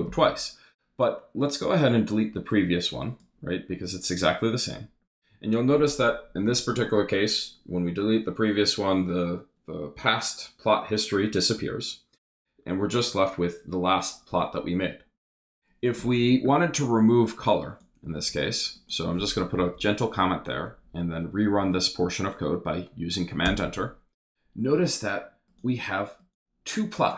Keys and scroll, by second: 18.1 shift+3, 19.6 shift+0, 20.3 shift+Up, 23.4 super+Return.